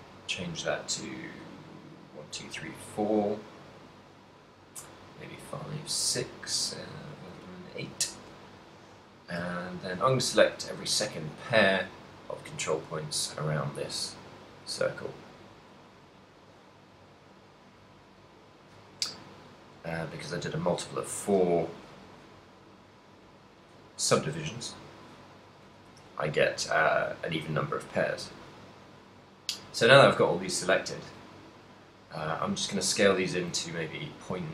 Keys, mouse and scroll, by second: 1.1 click, 2.2 click, 4.8 click, 5.5 click, 7.3 click, 9.0 right click, 9.8 shift+right click, 10.9 shift+right click, 11.2 shift+right click, 12.4 shift+right click, 12.8 shift+right click, 14.0 shift+right click, 14.8 shift+right click, 16.5 shift+right click, 17.7 shift+right click, 18.6 shift+right click, 19.8 shift+right click, 20.2 shift+right click, 21.2 shift+right click, 21.7 shift+right click, 23.1 shift+right click, 23.5 shift+right click, 24.2 shift+right click, 24.7 shift+right click, 26.0 s.